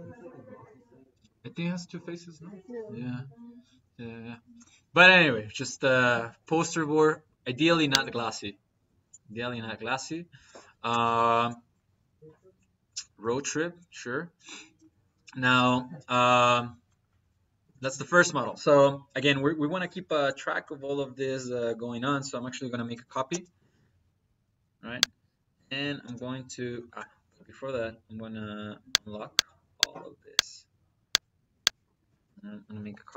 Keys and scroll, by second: 20.7 Escape, 22.3 c, 22.9 p, 23.2 space, 25.9 space, 26.6 Escape, 31.9 Escape, 32.6 c, 33.1 p.